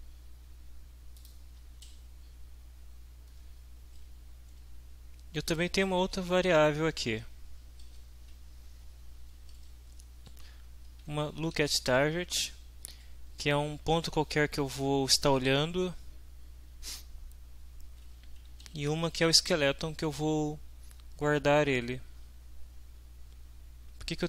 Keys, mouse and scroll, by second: 1.1 click, 2.8 Down, 4.6 Up, 6.4 Home, 7.5 Up, 7.8 Down, 8.7 Up, 9.5 Down, 10.3 Down, 11.5 shift+End, 13.5 Down, 18.2 Home, 18.6 shift+End.